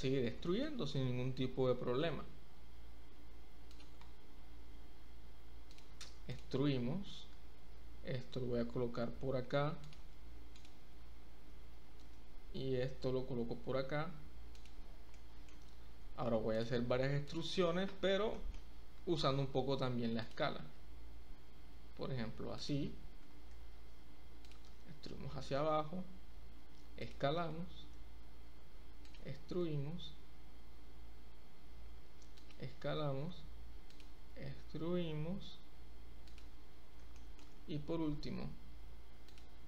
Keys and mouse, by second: 0.5 shift+middle click, 1.0 e, 1.4 z, 5.7 click, 6.3 click, 7.3 g, 9.8 click, 12.1 g, 15.2 shift+middle click, 16.5 click, 18.3 shift+middle click, 18.4 shift+click, 18.9 e, 19.3 z, 20.2 click, 20.7 s, 22.6 click, 23.3 e, 23.6 z, 24.5 click, 25.2 s, 27.1 click, 27.6 e, 28.0 z, 29.0 click, 29.6 s, 32.3 click, 33.0 e, 33.3 z, 33.9 click, 34.1 s, 36.2 click, 37.1 shift+click, 37.3 shift+middle click, 37.5 e, 38.3 z, 39.2 click.